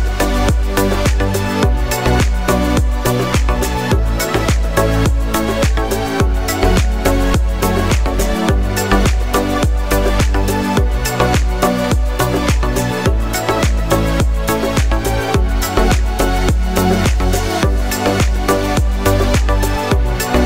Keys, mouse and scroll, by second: 1.2 click, 1.6 scroll up 1, 3.0 click, 6.4 click, 9.8 scroll up 1, 11.7 click, 12.9-13.2 scroll down 1, 14.2 click, 15.5 scroll down 1, 17.1 click, 17.7 scroll down 1, 19.7 click.